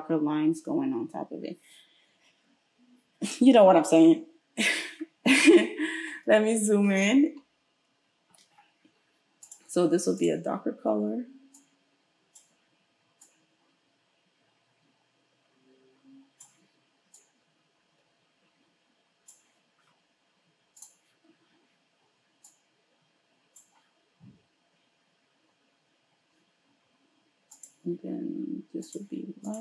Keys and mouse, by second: 10.2-20.8 middle drag, 20.8 click, 20.8-27.6 middle drag, 27.6 click, 27.7-28.9 middle drag, 28.9-29.5 drag, 29.5-29.6 middle drag.